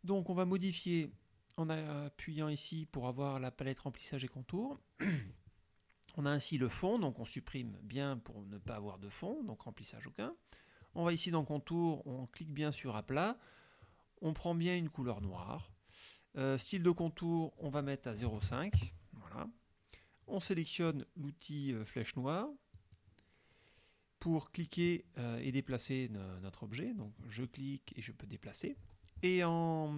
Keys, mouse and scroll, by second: 7.2 click, 10.9 click, 12.9 click, 13.9-15.4 drag, 16.7 click, 18.3 KP_0, 18.4 KP_Decimal, 18.5 KP_5, 18.8 KP_Enter, 22.8 click, 24.7-27.2 drag, 28.0-29.9 drag.